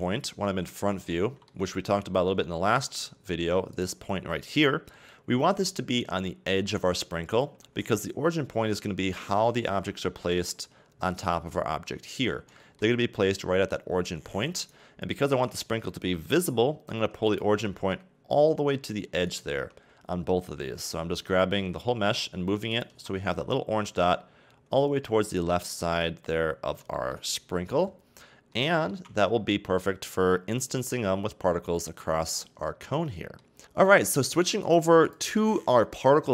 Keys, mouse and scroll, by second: 0.4 KP_1, 1.1-2.1 shift+middle drag, 2.1-2.4 scroll up 2, 2.4-2.8 shift+middle drag, 2.8-3.7 scroll up 2, 3.7 click, 10.6-12.0 scroll down 4, 12.0-12.6 scroll up 2, 12.6-13.0 shift+middle drag, 13.0-14.6 scroll up 2, 14.6 right click, 15.3 Tab, 16.2 g, 17.5 a, 17.7 Tab, 19.3 right click, 19.5 Tab, 20.7 g, 22.9 a, 23.1 Tab, 25.9-26.9 scroll down 2, 26.9-27.4 shift+middle drag, 27.4-28.0 scroll down 2, 28.0-28.5 scroll down 2, 28.5-31.5 shift+middle drag, 32.1 scroll down 2, 32.4-33.6 middle drag, 34.6 click.